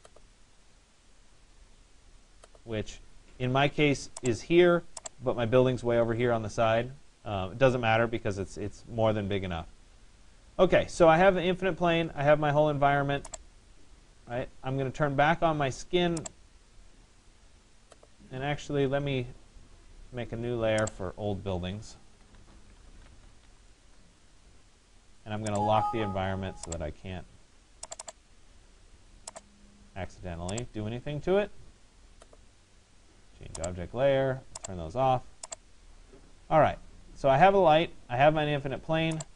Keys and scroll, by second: 23.4 Return.